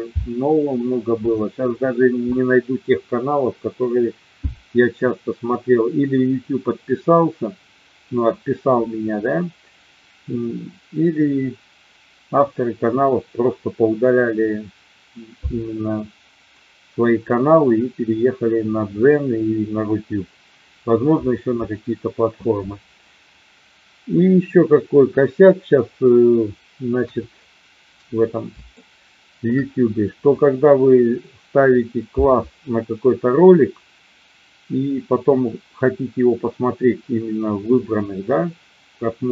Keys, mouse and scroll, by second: 26.9 KP_1, 28.7-29.3 shift+middle drag.